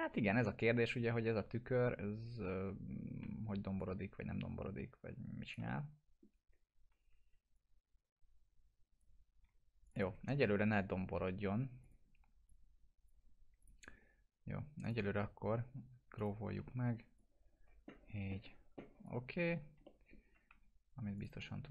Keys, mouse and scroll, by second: 3.8-5.7 drag, 5.7-6.3 alt+middle drag, 7.6-9.1 drag, 9.9 click, 10.5 ctrl+BackSpace, 11.2 1, 11.8 click, 16.5 e, 17.2-19.4 drag, 19.9 alt+middle click, 20.5 2, 21.2 click.